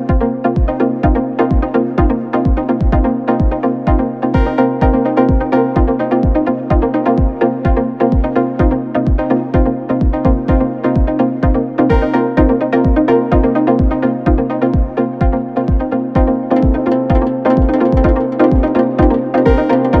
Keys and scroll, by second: 16.3 4, 19.1 3.